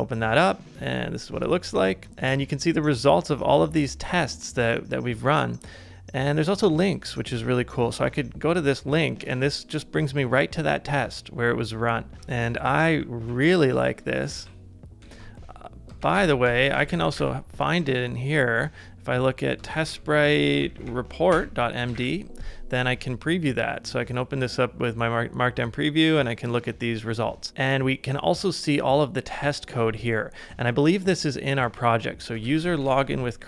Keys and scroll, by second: 12.1 ctrl+d, 12.8 ctrl+d, 13.3 ctrl+d, 14.3 super+Tab, 15.0 super+Tab, 16.1-17.7 typing, 19.8 Up, 20.5 Up, 21.3 Return, 21.7-22.5 typing, 32.4 super+c, 32.9 super+Tab.